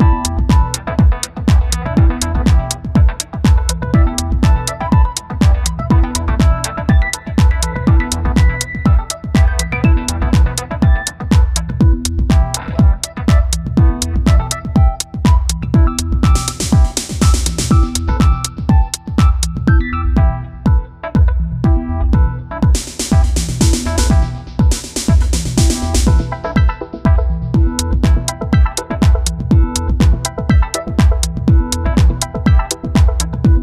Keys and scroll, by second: 0.3 [, 3.9 space, 8.9 [, 18.6 space, 24.4 space, 28.3 ctrl+z.